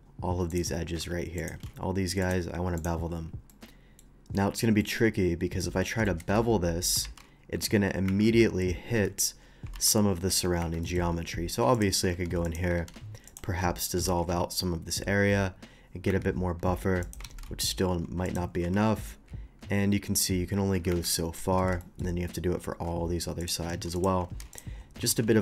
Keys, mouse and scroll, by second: 0.5 shift+click, 1.3 click, 2.2 click, 2.7 click, 3.5 middle click, 4.8 middle click, 6.0 shift+middle click, 6.3 Tab, 7.0 ctrl+b, 8.0 Escape, 9.0 Tab, 9.4 middle click, 9.7 ctrl+b, 10.6 Escape, 10.8 middle click, 11.1 middle click, 11.1 scroll up 1, 11.7 click, 12.4 ctrl+x, 12.4 click, 12.9 ctrl+x, 13.2 click, 13.3 middle click, 13.6 middle click, 14.0 ctrl+b, 16.0 Escape, 17.0 click, 18.0 ctrl+x, 18.2 click, 18.6 ctrl+b, 20.9 Escape, 21.0 middle click, 21.3 middle click, 21.8 shift+middle click, 22.6 shift+middle click, 23.4 shift+click, 23.9 ctrl+x, 23.9 ctrl+click, 24.2 ctrl+x, 24.5 click, 24.7 middle click, 25.1 ctrl+b.